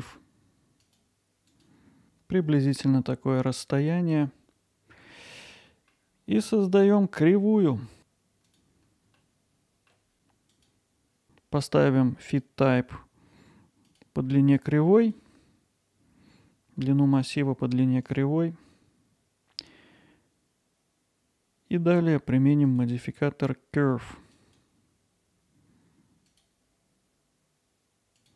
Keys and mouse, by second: 1.4 click, 4.1-5.1 alt+middle drag, 5.7 middle click, 6.5-7.9 middle drag, 8.0 shift+a, 9.2-9.9 alt+middle drag, 12.3-14.0 drag, 15.0 click, 22.7-24.6 drag, 26.3 click, 27.9 alt+middle click.